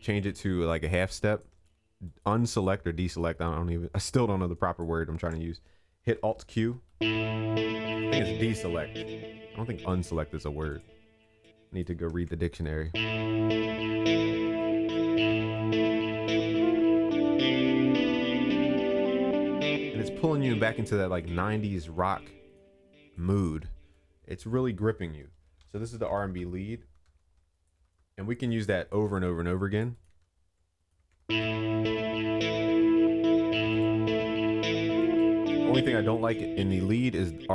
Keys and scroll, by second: 6.3 alt+q, 12.1 ctrl+s, 21.7 ctrl+s, 27.7 ctrl+s, 30.7 ctrl+s.